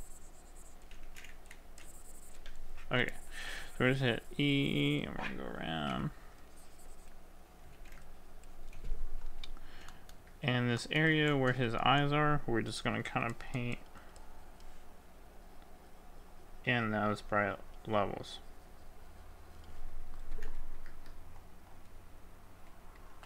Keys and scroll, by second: 7.9 z, 11.2 ctrl+z.